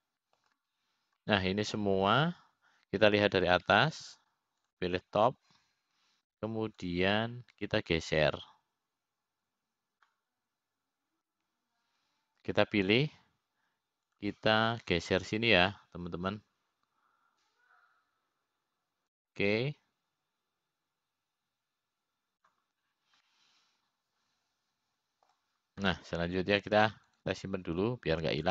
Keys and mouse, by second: 1.2-3.1 middle drag, 3.9 middle click, 9.5-14.7 drag, 16.9 click, 18.5-25.4 drag, 26.0-28.0 middle drag.